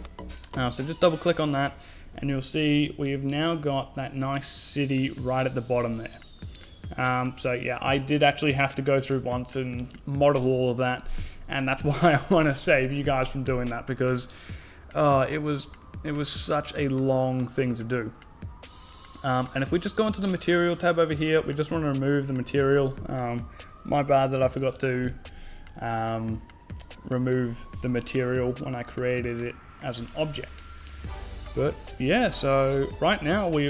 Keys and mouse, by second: 0.0-1.8 drag, 2.3 z, 5.1 z, 13.7-15.2 right drag, 15.4-17.0 drag, 21.2-22.9 drag, 29.1 a, 30.1 KP_0, 31.1 z.